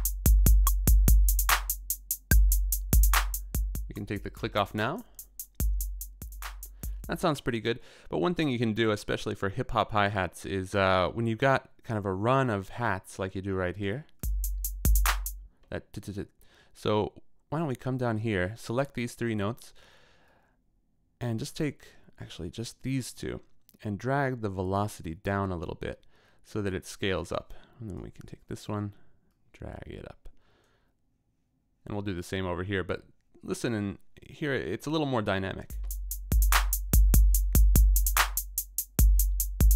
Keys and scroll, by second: 8.2 space, 15.4 space, 35.7 space.